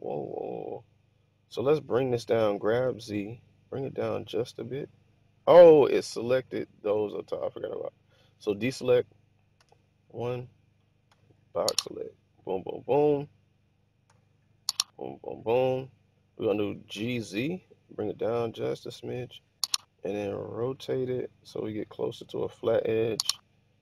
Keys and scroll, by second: 0.0-0.6 typing, 2.1-3.2 typing, 5.3-6.0 typing, 8.7 alt+a, 9.5 1, 11.0 b, 14.0 b, 16.9 g, 17.3 z, 20.6 r.